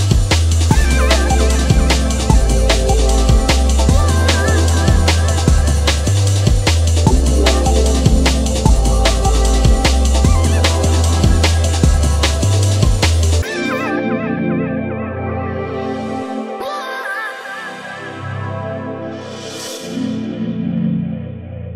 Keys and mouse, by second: 1.8 space, 2.1 ctrl+Tab, 3.8 click, 4.5 space, 5.8 click, 6.3 shift+click, 7.5 click, 9.0 click, 10.6 click, 12.1 click, 13.3 click, 14.6-15.4 drag, 16.2 alt+click.